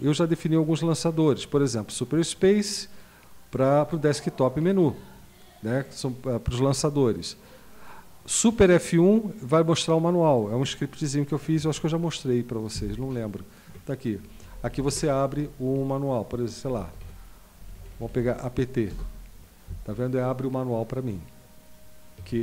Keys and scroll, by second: 12.8 super+F1, 14.4 Down, 14.5 Down, 14.7 Down, 14.9 Down, 16.7 Down, 16.9 Down, 17.0 Down, 17.6 Down, 17.8 Down, 17.9 Down, 18.1 Down, 18.9 Return, 22.3 q.